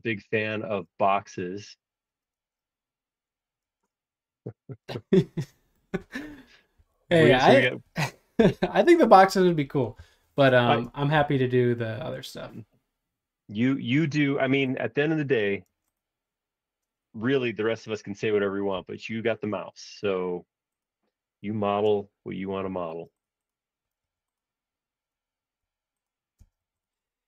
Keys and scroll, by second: 0.6 super+Tab, 2.4 super+Tab, 3.6 super+Tab, 6.7 r, 8.4 Right, 10.1 Left, 15.6 space, 18.7 super+z, 22.6 b, 26.4 space, 26.6 Escape.